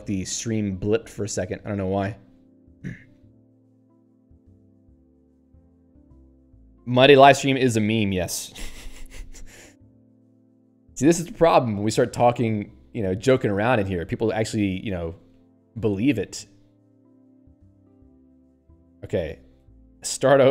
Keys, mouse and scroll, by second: 5.4 click, 5.7 Escape, 13.0 scroll down 1, 13.7 scroll down 1, 15.2 click, 15.3 click, 15.6 Tab, 16.2 scroll down 1, 17.1 click, 17.3 Tab, 17.7 ctrl+n, 18.7 p, 19.6 Tab, 20.0 n.